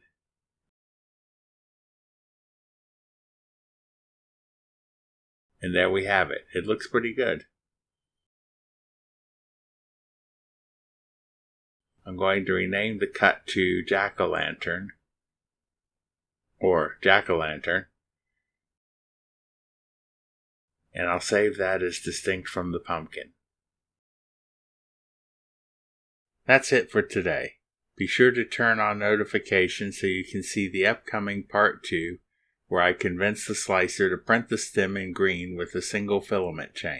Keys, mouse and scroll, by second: 0.9 click, 2.0 click, 4.0 click, 5.0 click, 5.4 middle click, 5.8 scroll up 1, 7.4 scroll up 1, 7.5 scroll down 2, 8.9 click, 9.3 click, 9.6-10.7 typing, 12.0 click, 12.4 click, 13.0 click, 13.5-16.1 typing, 16.9 click, 17.0 right click, 17.6 click, 18.3 click, 19.0 BackSpace, 19.4 shift+j, 20.2 Return, 21.2 click, 22.4 click, 23.2-25.4 typing, 25.7 Return.